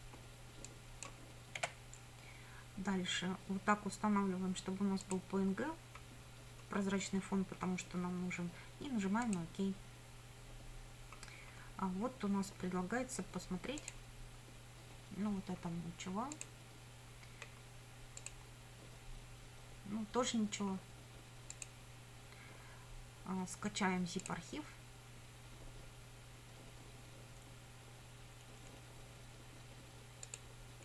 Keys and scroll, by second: 1.6 6.